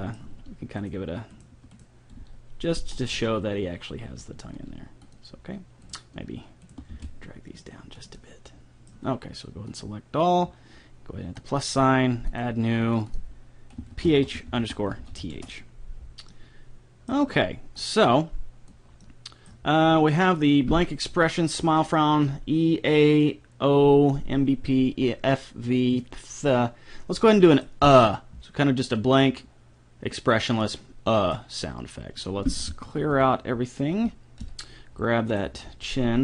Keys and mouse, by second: 0.3 g, 1.3 right click, 2.2 g, 4.5 g, 5.9-7.1 right drag, 6.9 g, 9.7-15.1 drag, 16.3-18.3 middle drag, 17.9-19.4 drag, 17.9 right click, 19.0-21.5 middle drag, 19.0 right click, 22.9-24.6 drag, 27.3 middle click, 31.3-32.5 middle drag, 33.0 alt+g, 34.4 KP_3, 35.3-36.2 right drag, 35.7 g.